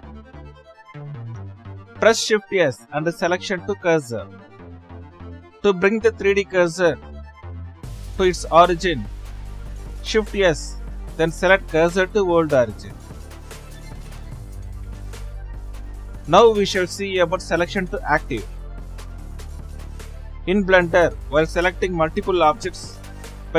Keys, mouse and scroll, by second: 0.3-1.5 drag, 3.9 shift+s, 5.0 click, 5.9 scroll up 3, 10.4-12.9 right drag, 16.0-16.7 right drag, 16.8-21.1 shift+middle drag, 22.2 click, 23.1 Left.